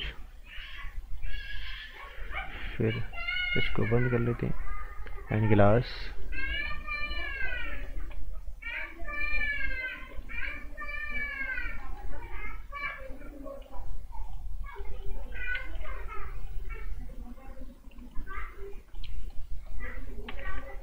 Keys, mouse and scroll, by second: 11.5 scroll down 1, 11.7 right click, 13.6 b, 14.2 click, 14.5 scroll up 1, 14.7 right click, 15.6 g, 16.1 click, 19.3 right click, 20.2 z.